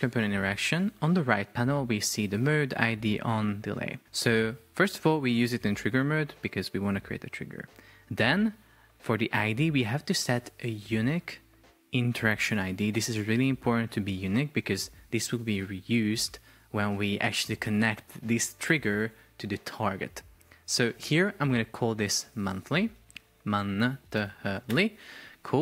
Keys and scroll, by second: 23.0 BackSpace, 24.7 Return.